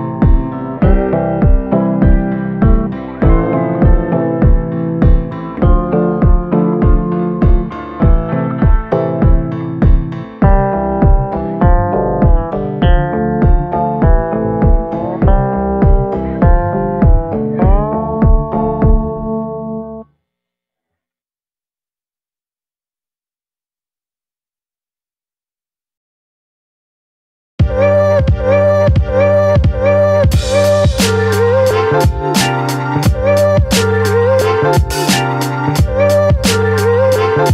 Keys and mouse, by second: 0.8-4.3 right drag, 4.3 click, 5.4 click, 5.8 shift+click, 6.4 middle click, 7.2 middle click, 7.9 shift+middle click, 8.2 middle click, 8.9 middle click, 9.4 shift+middle click, 9.8 middle click, 10.2 shift+middle click, 10.4-12.1 middle drag, 12.1 a, 12.4 middle click, 13.5 shift+middle click, 15.2 ctrl+i, 15.6 b, 17.0-21.8 typing, 26.1 b, 26.7 b, 27.4 b, 28.2 b, 29.3 middle click, 29.9 b, 30.9 middle click, 32.9 b, 33.7 middle click, 34.7 b, 35.3 b, 36.0 b.